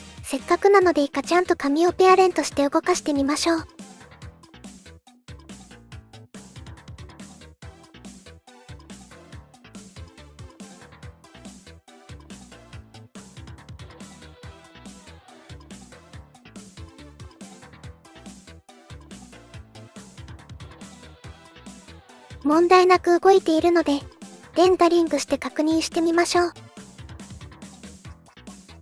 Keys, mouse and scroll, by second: 0.0 ctrl+p, 4.1 r, 5.8 ctrl+z, 6.7 click, 7.4 r, 11.3 ctrl+z, 12.1 shift+middle click, 12.7 shift+middle click, 14.0 i, 14.2 click, 14.7 g, 15.3 i, 16.0 click, 17.1 g, 18.0 click, 18.4 i, 19.0 shift+d, 20.4-21.5 drag, 22.1 space.